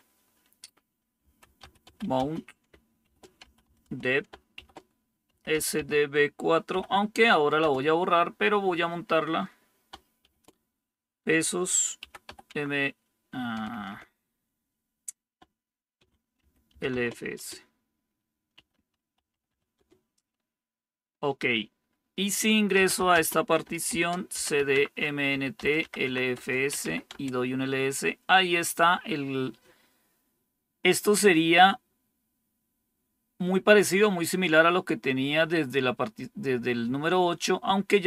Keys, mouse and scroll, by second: 1.1-7.5 typing, 10.1 typing, 11.9 typing, 12.4 Tab, 13.2-14.3 typing, 15.7-19.9 typing, 21.9-27.2 typing, 37.9 click.